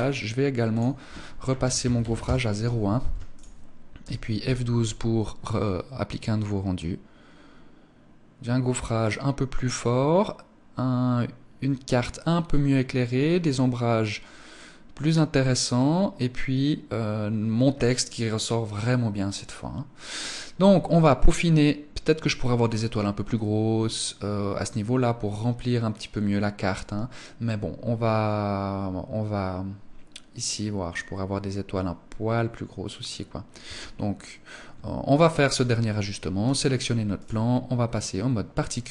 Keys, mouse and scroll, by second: 0.1 click, 2.4 ctrl+s, 33.0 Escape, 35.8 right click, 36.6 click, 37.4 click, 38.8 click.